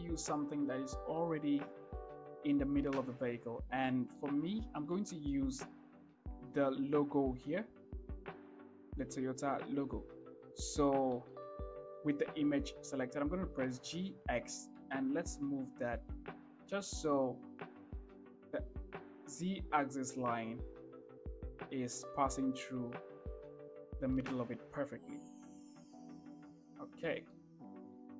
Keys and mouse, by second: 4.5 shift+middle click, 5.3 shift+middle drag, 10.7-11.1 shift+middle drag, 14.1 g, 14.5 x, 27.6-27.9 shift+middle drag.